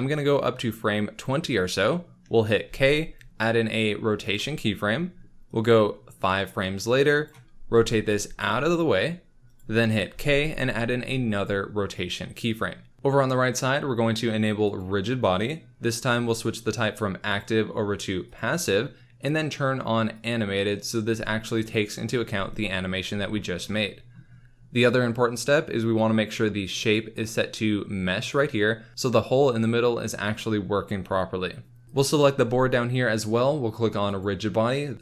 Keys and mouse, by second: 0.1 middle click, 2.6 k, 5.4 click, 7.7 r, 8.0 y, 9.5 click, 10.1 k, 14.6 click, 17.4-18.3 drag, 20.1 click, 26.8-28.4 drag, 34.0 click, 34.9-35.0 drag.